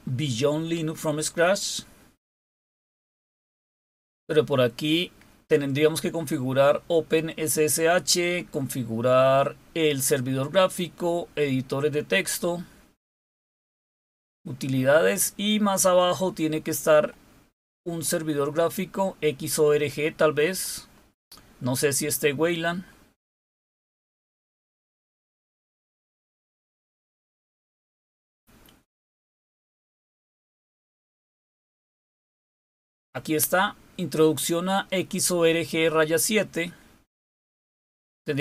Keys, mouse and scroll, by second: 0.6-1.0 scroll down 4, 1.7-2.4 scroll down 5, 3.1 scroll down 2, 3.7-4.8 scroll down 3, 6.5-7.8 scroll down 4, 8.4-9.6 scroll down 4, 10.9-12.3 scroll down 4, 13.4-17.0 scroll down 9, 17.7-18.8 scroll down 4, 19.6 scroll down 2, 20.4-20.9 scroll down 4, 21.7-23.2 scroll down 3, 23.6-26.9 scroll down 8, 27.3-30.8 scroll down 3, 32.0-33.3 scroll down 3, 33.5-34.5 scroll up 2, 35.8-36.9 scroll down 4.